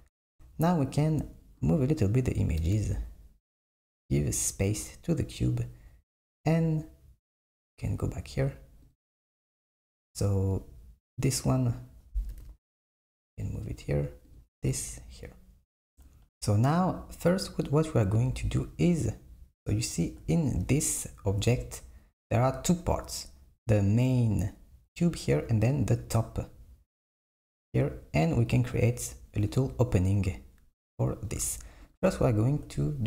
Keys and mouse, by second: 1.7 click, 2.7 g, 7.4-9.0 drag, 12.5 g, 14.4 click, 14.7 g, 16.9 click, 18.3 KP_1, 31.9 click, 32.9 click.